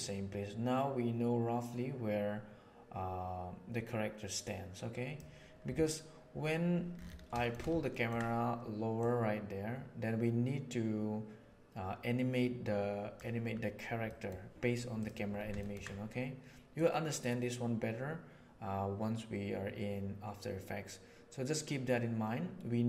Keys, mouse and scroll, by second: 3.8-4.4 middle drag, 4.4 click, 4.5-5.1 middle drag, 7.3 shift+middle click, 7.8 ctrl+middle click, 8.9 click, 9.1-13.1 middle drag, 14.0 middle click, 14.9 click, 15.5 ctrl+middle click, 16.7-22.8 drag.